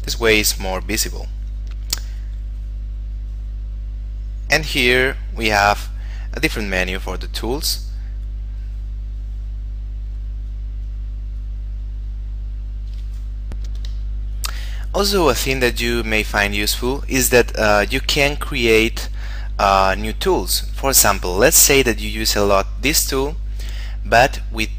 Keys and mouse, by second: 8.4 click, 14.1 F9, 15.8 click, 18.8 click, 23.1 click.